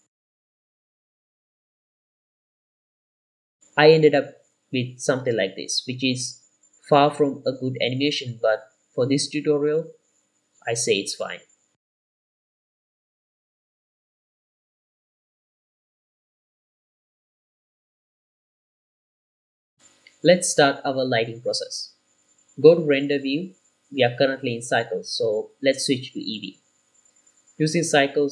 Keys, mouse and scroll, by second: 0.2-1.5 drag, 1.5 g, 1.8 i, 2.0 click, 2.9 r, 3.2 g, 3.5 click, 7.5 space, 18.9 space, 19.7 click, 22.0 z, 24.0 ctrl+s, 25.0-26.2 drag.